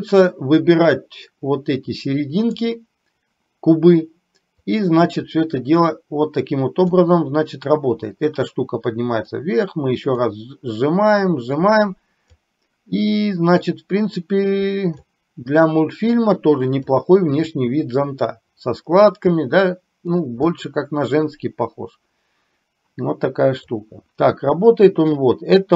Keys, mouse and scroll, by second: 0.1-2.7 drag, 4.8-7.2 drag, 9.6-12.4 drag, 13.7-15.2 drag, 16.3 click, 17.2-20.2 middle drag, 20.6-22.7 middle drag, 23.8-25.2 drag.